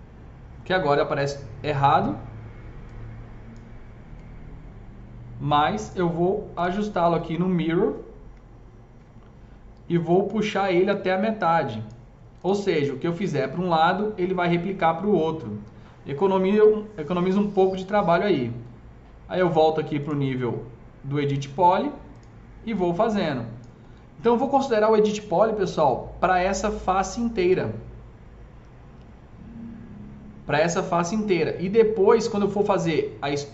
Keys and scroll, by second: 10.8 s.